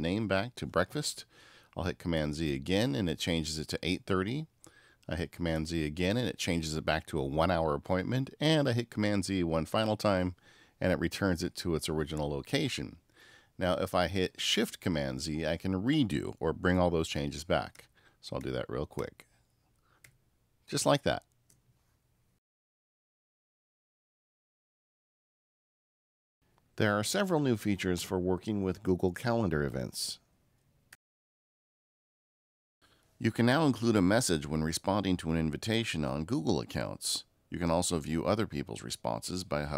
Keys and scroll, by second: 2.0 super+z, 5.4 super+z, 9.7 super+z, 17.7 shift+super+z.